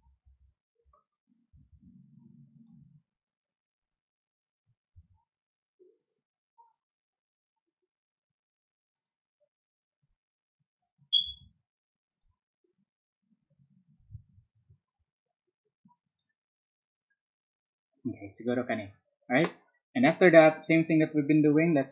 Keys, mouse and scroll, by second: 1.5 z, 2.5 click, 6.0 click, 8.9 click, 11.2 ctrl+z, 12.1 click, 16.0 click, 21.8 click.